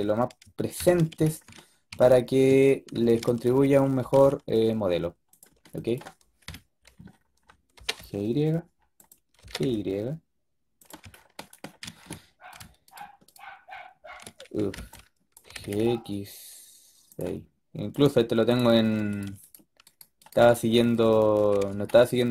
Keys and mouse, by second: 3.9 g, 6.3 KP_7, 7.6 g, 9.3 g, 12.4-15.4 drag, 14.4 a, 14.6 b, 15.4 g, 17.8-22.3 drag, 21.2 f.